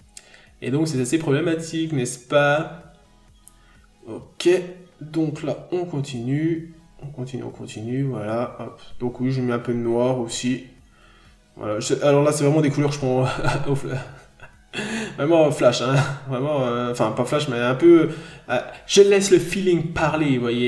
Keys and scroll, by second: 2.2 n, 2.5 b, 6.2 ctrl+z, 9.2 n, 12.0 b, 12.8 ctrl+z, 13.1-15.4 typing, 14.9 ctrl+z, 15.6 ctrl+z, 16.9 b, 17.3 n, 18.4 p, 19.2 b, 20.2-20.6 scroll down 1.